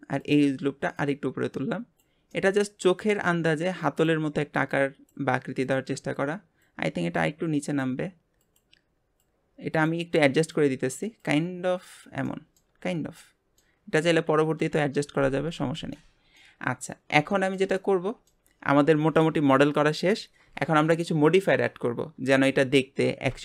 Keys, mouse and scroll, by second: 0.2 click, 0.9 click, 2.3-3.9 middle drag, 3.9 click, 4.7 click, 5.6 click, 6.6 click, 8.4 click, 9.2 click, 10.4 click, 11.2 click, 12.3 middle click, 12.7 Tab, 12.9 scroll down 1, 13.2-14.6 middle drag, 14.6 KP_7, 15.0 Tab, 15.6 Tab, 15.9-16.6 middle drag, 16.6 scroll up 1, 17.3-20.9 shift+middle drag.